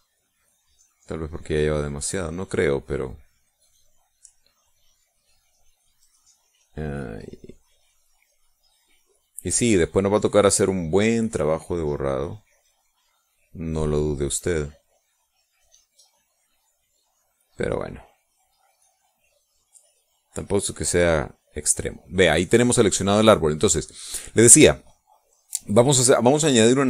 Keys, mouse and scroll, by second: 0.4 click, 0.9 click, 1.4 click, 1.9 click, 2.8 click, 3.3 click, 3.7 click, 4.4 click, 4.9 click, 5.9 click, 7.5 click, 8.3 click, 9.1 click, 9.9 click, 10.5 click, 11.3 click, 12.4 click, 13.2 click, 14.0 click, 14.8 click, 15.4 click, 16.0 click, 16.5 click, 17.0 click, 17.4 click, 17.9 click, 18.4 click, 18.9 click, 19.3 click, 20.1 click, 20.5 click, 21.3 click, 21.8 click.